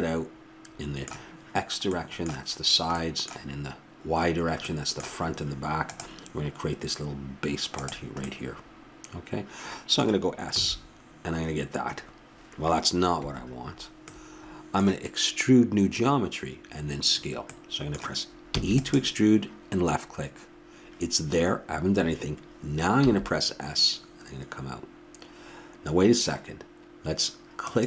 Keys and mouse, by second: 8.8-18.5 middle drag, 18.5 e.